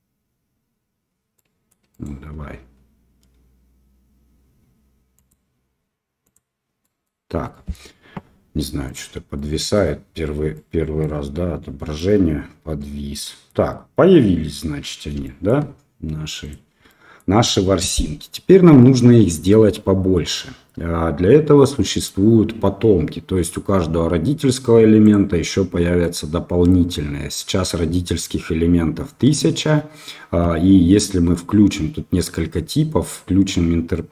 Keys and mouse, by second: 6.8 middle click, 7.5 middle drag, 8.8 click, 9.3-9.8 middle drag, 10.5 middle click, 11.9-13.5 middle drag, 15.2 shift+middle drag, 16.4 click, 16.8-17.2 middle drag, 25.0 click, 26.0-26.6 middle drag.